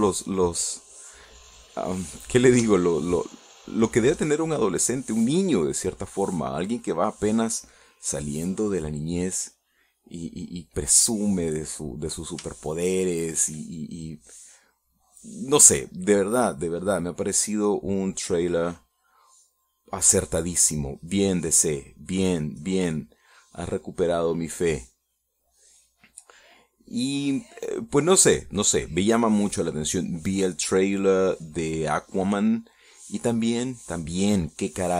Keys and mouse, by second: 1.7 click, 3.3-5.5 middle drag, 8.4 click, 9.3 click, 10.3 click, 11.1 click, 14.0 shift+middle click, 15.8 middle click, 16.7-20.5 drag, 20.6 middle click, 21.4-23.5 drag, 23.5-25.8 middle drag, 28.1-33.7 drag, 34.3 middle click.